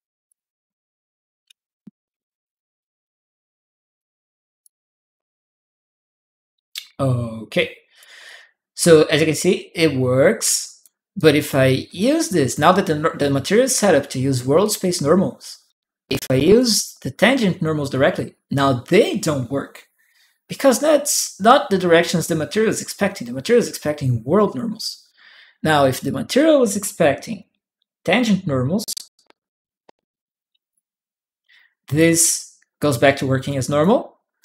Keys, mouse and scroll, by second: 0.0 click, 1.4 Tab, 1.5 Tab, 3.7 click, 7.3 click, 8.0-10.6 drag, 10.9 click, 11.8 click, 13.0 click, 14.4-15.4 drag, 16.3 click, 17.9-20.3 drag, 23.6 click, 24.6 click, 25.8 click, 27.0 click, 27.3 right click, 28.5 click, 30.5-33.6 drag, 34.2 right click.